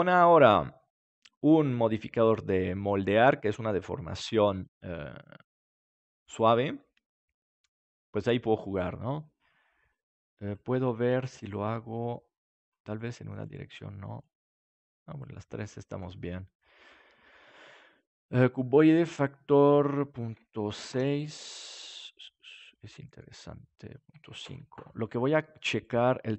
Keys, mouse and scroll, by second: 2.5-6.0 middle drag, 9.9-16.5 drag, 10.7-12.5 middle drag, 20.1-21.8 drag, 21.6-23.4 middle drag, 23.9-26.3 drag.